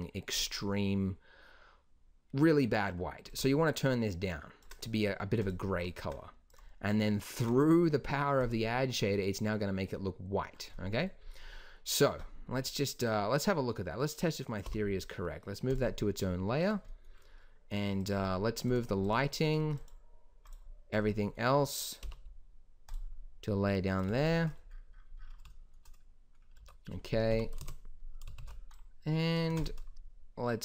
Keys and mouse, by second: 8.4-10.5 drag, 12.5-13.1 middle drag, 14.6 m, 22.0 m, 25.6 drag, 25.9 middle drag, 26.6 a, 27.2 KP_Decimal, 27.5 KP_0, 28.3 shift+b, 29.4 ctrl+s.